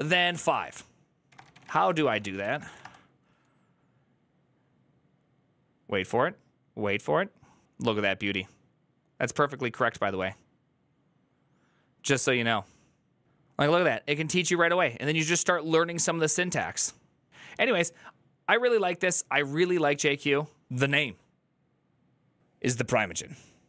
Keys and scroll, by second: 0.0-2.9 typing, 4.2 typing.